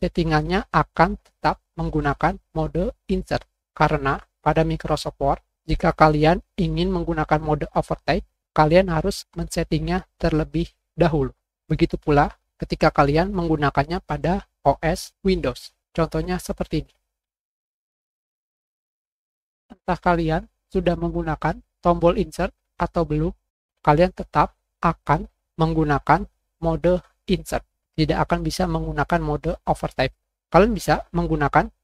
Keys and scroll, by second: 20.9 Page_Up, 21.0 End, 21.2 Insert.